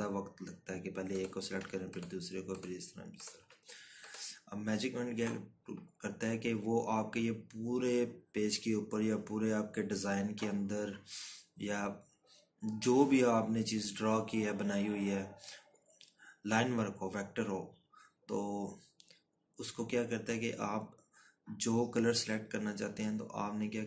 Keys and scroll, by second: 0.6 Right, 1.5 Left.